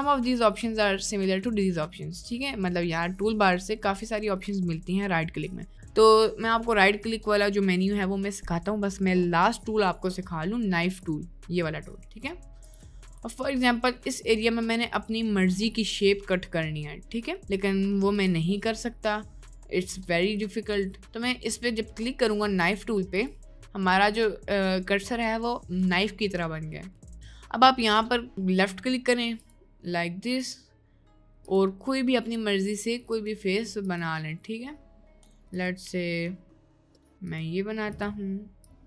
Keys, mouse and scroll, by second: 2.0 middle click, 6.7 middle click, 7.8-8.8 middle drag, 10.2 middle click, 13.5 shift+middle click, 14.7 shift+middle click, 23.1 click, 28.0-38.8 drag.